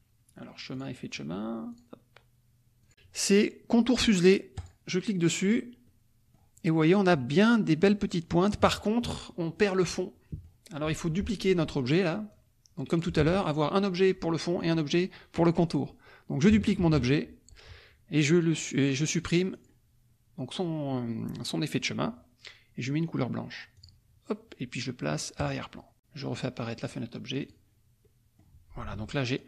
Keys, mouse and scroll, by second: 0.8 click, 1.7 click, 2.8 click, 4.5 click, 5.9 click, 9.8 click, 12.3 click, 13.2 ctrl+z, 16.8 ctrl+d, 19.5 click, 23.7 click, 25.3 click, 26.8 click, 27.5 click, 28.0 middle click, 28.9 F2, 29.2 click.